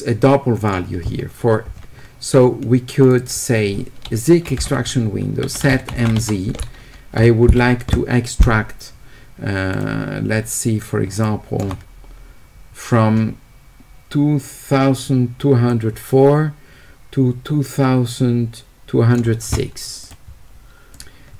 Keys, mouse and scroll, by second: 0.6 click, 3.0 click, 3.2 click, 5.2-6.2 typing, 9.7 click, 11.2 shift+right click, 15.7-19.2 drag, 20.9 click.